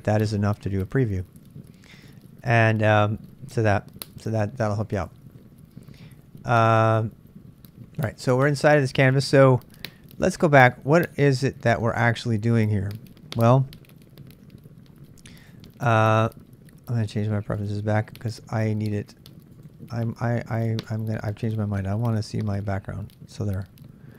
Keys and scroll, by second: 4.7-5.5 typing, 6.6-8.4 typing, 9.1 super+Tab.